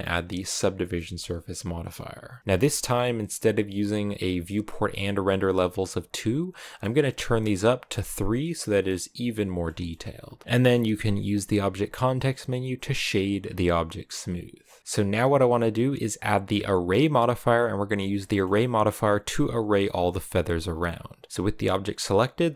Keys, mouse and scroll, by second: 2.4-7.1 scroll up 1, 7.1 click, 8.1 scroll down 2, 8.4-13.0 middle drag, 13.0 w, 13.2 scroll down 3, 13.4-14.8 middle drag, 14.8 Tab, 18.1 middle click, 18.2-20.1 scroll down 1, 20.1-20.7 scroll down 1, 20.7-21.5 scroll up 2.